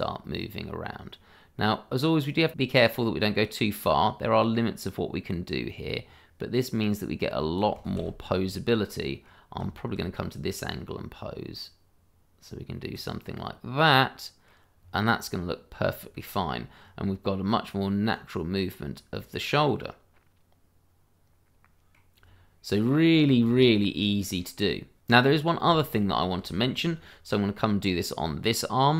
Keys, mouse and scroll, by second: 7.9 ctrl+z, 8.4 middle click, 10.3 click, 13.2 middle click, 14.8-16.1 scroll down 1, 16.1 middle click, 16.8-18.1 scroll up 1, 18.1 click, 19.7 middle click, 22.2-23.3 scroll down 1, 23.4 shift+middle click, 23.4 middle click, 23.7-24.1 shift+scroll up 2, 24.1 middle click, 25.1 middle click, 25.9 shift+middle click, 26.0-26.5 scroll up 1, 26.5 shift+middle click.